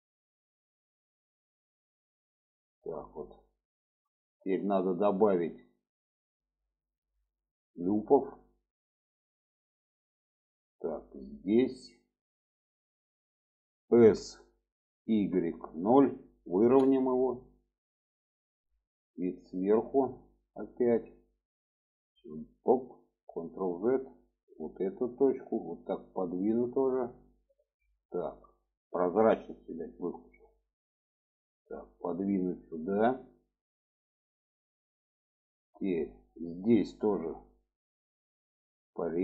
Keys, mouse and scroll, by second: 0.3 click, 1.0 click, 2.9 shift+middle click, 3.7 shift+middle click, 4.9-6.0 middle drag, 7.1 alt+z, 8.9 click, 11.2-13.9 drag, 13.9 s, 18.6 click, 18.9 middle click, 20.7 shift+middle click, 21.7 click, 23.0 ctrl+z, 23.4 click, 24.2 click, 25.5-27.2 drag, 27.5 ctrl+z, 28.9 ctrl+z, 29.6 click, 30.5 click, 31.4 click, 33.2-33.6 shift+middle drag, 34.3-35.0 shift+middle drag, 35.3-35.7 shift+middle drag, 38.3 click.